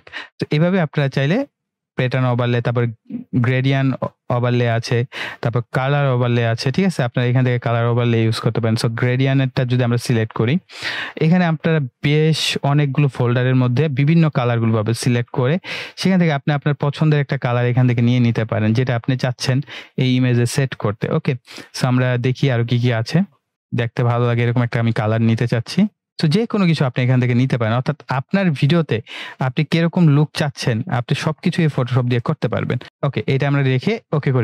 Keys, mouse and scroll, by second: 5.4 click, 13.4-14.0 scroll down 1, 14.1 click, 14.9-16.0 scroll down 1, 16.0 click, 16.6-17.9 scroll down 1, 17.9 click, 18.6-19.2 scroll down 1, 19.9 click, 20.8-22.2 scroll down 1, 22.2 click, 22.6-23.5 scroll down 1, 24.4 click, 29.3 scroll up 1, 31.6 click.